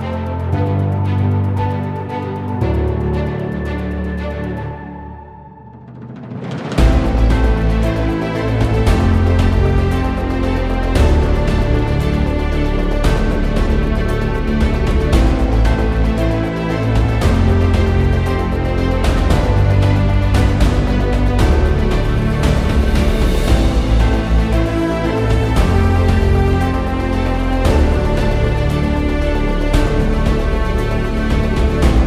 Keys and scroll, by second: 7.5 ctrl+t, 8.7 ctrl+t, 19.6 e, 22.5 ctrl+z, 23.0-23.4 typing, 25.0 ctrl+z, 26.7 ctrl+z, 27.8 /, 30.4-31.1 typing.